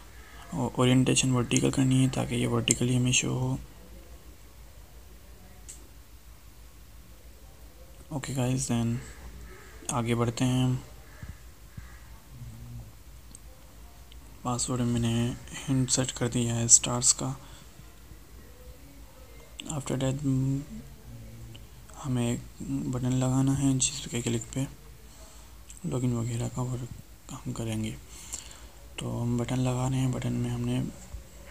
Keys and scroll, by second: 7.8 ctrl+Left, 8.1 ctrl+shift+Right, 26.8 ctrl+c, 29.6 ctrl+v.